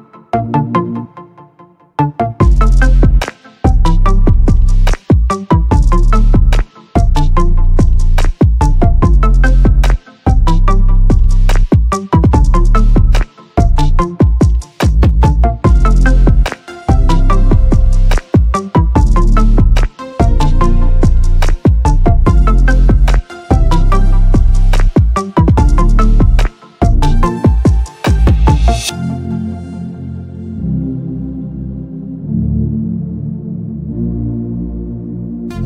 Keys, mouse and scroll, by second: 0.0 click, 1.4 shift+click, 2.0 shift+click, 2.2 middle click, 2.6 click, 3.1 middle click, 3.4 g, 6.2 middle click, 6.5 Tab, 6.5 middle click, 7.0-7.8 drag, 7.9 middle click, 8.3 f, 8.6 shift+click, 9.8 click, 9.8 right click, 10.0 middle click, 10.2 shift+click, 10.7 click, 11.0 click, 11.4 KP_7, 11.8 o, 13.1 shift+click, 13.6 c, 20.1-21.3 drag, 22.0 click, 22.6 click, 23.2 ctrl+i, 23.9-25.6 drag, 24.6 s, 26.1-26.7 drag, 27.4-28.3 drag, 28.8 click, 30.0-33.9 drag, 34.6-35.6 drag, 35.4 e.